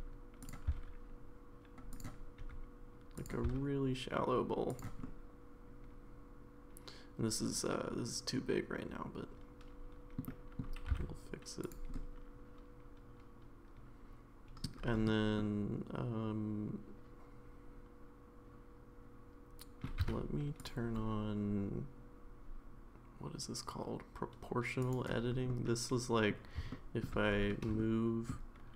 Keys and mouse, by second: 2.4 e, 2.4 s, 3.5 s, 5.0-10.2 middle drag, 10.3 middle click, 10.8 g, 11.9-14.6 middle drag, 15.4-19.8 middle drag, 20.0 1, 20.6 click, 24.8 click, 25.5 middle click, 26.7 shift+middle click, 27.8 shift+middle click.